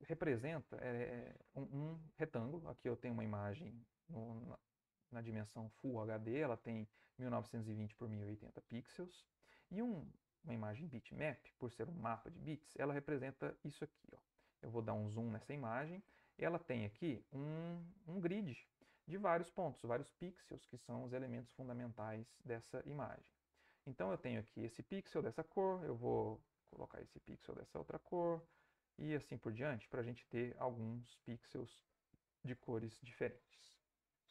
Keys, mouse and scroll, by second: 0.1 alt+Tab, 3.6 middle click, 9.2 middle click, 10.3-12.1 middle drag, 12.1 ctrl+scroll up 2, 12.3-13.5 ctrl+middle drag, 13.3 ctrl+scroll up 1, 13.8-15.3 ctrl+middle drag, 14.0-14.4 ctrl+scroll up 1, 14.9-16.0 ctrl+scroll up 2, 15.4-16.7 ctrl+middle drag, 17.3 click, 22.7 click, 26.2 click, 27.2 click, 28.8 click, 29.6 click, 30.8 click, 31.9 click.